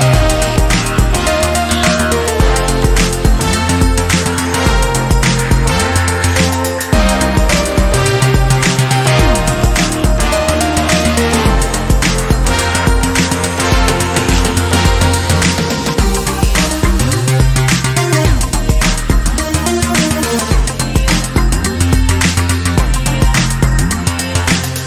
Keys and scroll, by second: 5.0 Return, 6.2 Left, 6.5 Left, 6.7 Left, 8.6 ctrl+j, 10.5 v, 14.6 v.